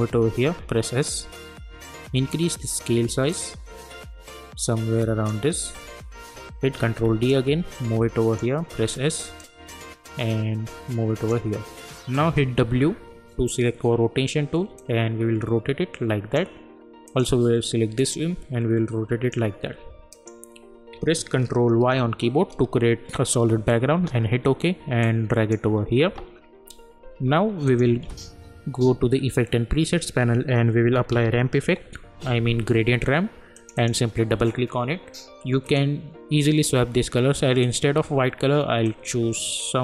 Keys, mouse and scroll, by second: 0.4 s, 1.0-6.7 drag, 6.7 ctrl+d, 7.3-8.7 drag, 8.7 s, 9.4-12.6 drag, 12.6 w, 14.8-20.1 drag, 21.7 ctrl+y, 23.9 Return, 25.0-27.6 drag, 28.0 ctrl+a, 29.1-30.8 scroll up 1, 30.6-32.1 typing, 33.5-39.8 drag.